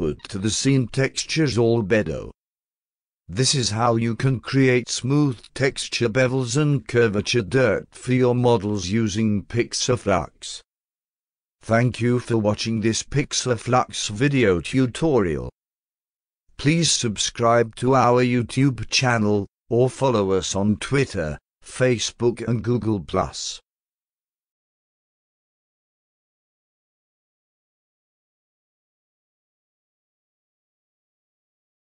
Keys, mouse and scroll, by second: 1.9-3.6 alt+drag, 4.4-4.8 alt+drag, 5.2-5.8 alt+right drag, 6.1-6.6 alt+middle drag, 6.9-8.2 alt+drag, 8.6-9.1 alt+middle drag, 9.3-9.8 alt+right drag, 10.1-11.3 alt+drag, 11.6-12.0 alt+middle drag, 12.2-13.7 alt+drag, 14.0-14.8 alt+middle drag, 15.1 alt+right click, 17.3-18.3 alt+middle drag.